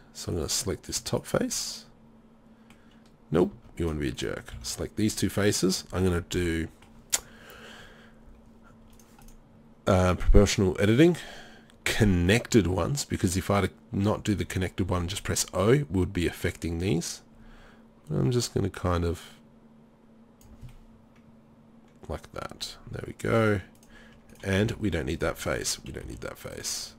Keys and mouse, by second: 1.9 middle click, 4.5 z, 6.9-7.9 middle drag, 17.1-20.4 drag, 20.7-23.8 middle drag, 23.8 click, 24.3 right click, 24.6 Delete, 26.0 Delete.